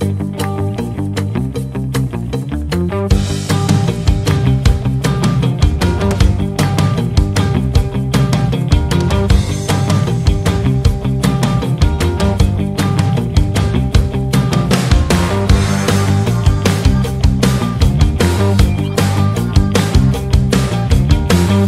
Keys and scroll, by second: 11.0 shift+F2, 14.8 KP_Add.